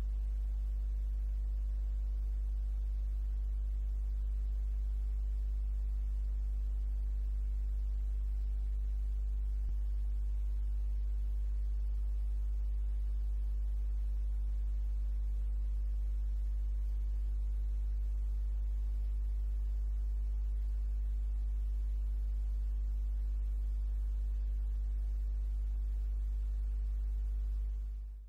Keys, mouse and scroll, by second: 6.3 click, 7.0 click, 8.0 middle click, 11.7 click, 13.4-16.2 drag, 16.5 click, 19.1 click, 20.7 click, 22.5 click, 23.8 click, 24.4 middle click.